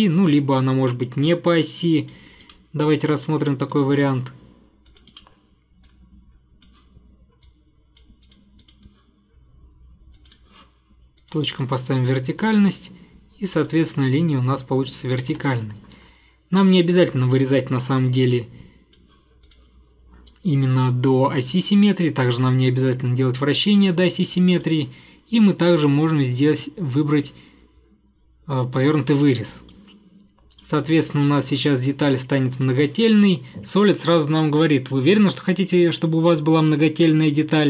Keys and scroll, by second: 2.5 Delete, 15.3 Escape.